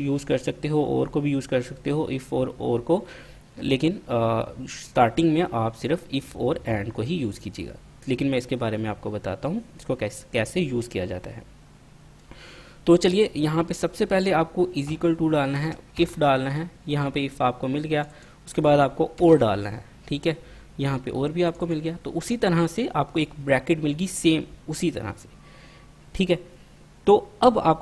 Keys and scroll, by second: 15.0 =, 16.1 typing, 18.5-19.9 typing.